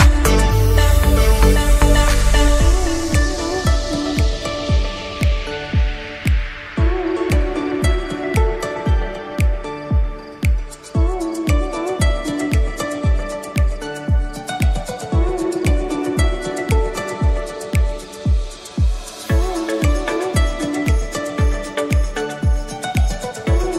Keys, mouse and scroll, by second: 0.4-1.0 scroll down 1, 1.0 s, 3.6-4.3 shift+middle drag, 4.3-4.7 scroll up 1, 4.7 s, 8.5-9.5 middle drag, 9.5 s, 10.9 KP_3, 12.7 shift+d, 15.6 click, 16.1-16.7 middle drag, 16.7 click, 20.5 click, 21.8 click, 23.5-23.7 middle drag.